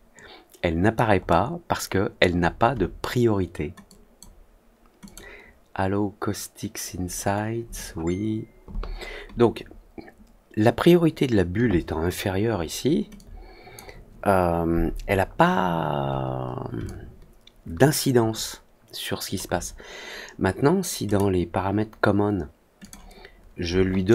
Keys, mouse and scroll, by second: 1.2-2.1 alt+middle drag, 3.8 click, 5.0 click, 13.1-13.7 drag, 15.2 scroll down 1, 15.3 scroll up 1, 15.9 scroll up 1, 16.8-19.3 alt+drag, 21.0 click, 22.7 click.